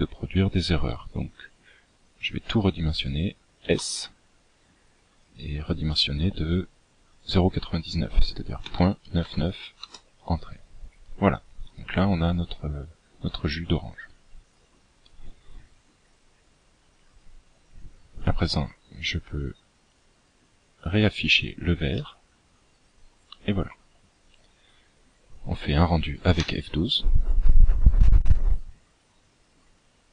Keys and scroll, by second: 1.1 s.